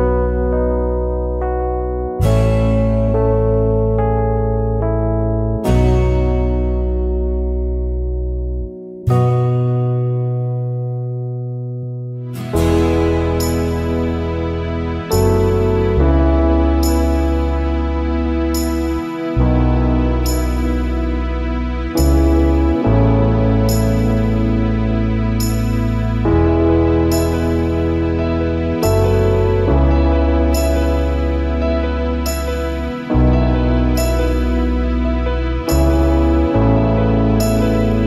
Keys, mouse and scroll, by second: 2.7 space, 4.6 space, 6.2 ctrl+z, 7.6 ctrl+z, 12.6 space, 14.1 alt+scroll up 1, 17.1 alt+scroll up 1, 17.4 space, 20.2 alt+scroll down 1, 20.4 space, 21.4 alt+scroll up 1, 24.2 alt+scroll down 1, 24.4 space, 26.1 alt+scroll down 1, 26.2 space, 27.9 alt+scroll up 1, 28.1 space, 28.6 alt+scroll up 1, 31.5 alt+scroll up 1, 34.6 ctrl+z, 36.6 alt+scroll down 1, 36.9 space, 37.7-38.0 alt+scroll up 2.